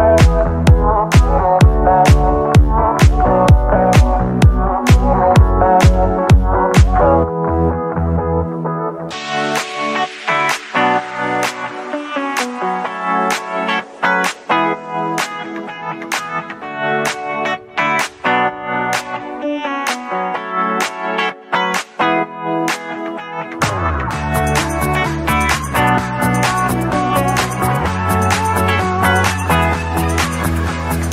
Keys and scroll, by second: 6.2 Escape, 17.5 ctrl+c, 21.7 ctrl+v.